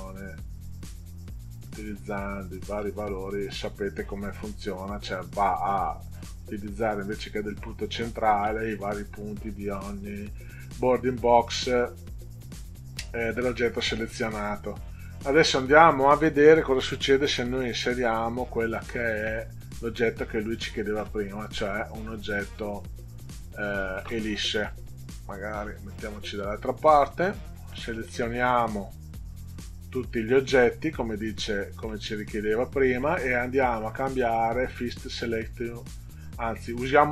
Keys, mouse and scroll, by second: 1.7 click, 2.7 click, 6.3 click, 17.1 click, 18.1-21.5 drag, 24.7-25.9 drag, 26.4 click, 26.5 middle click, 27.7 middle click, 29.3 click, 30.6 click, 31.9-32.9 middle drag.